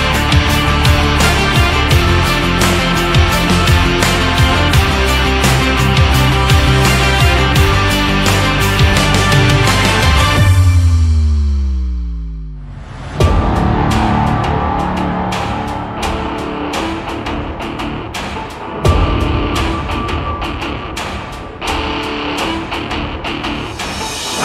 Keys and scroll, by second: 4.6 ctrl+z.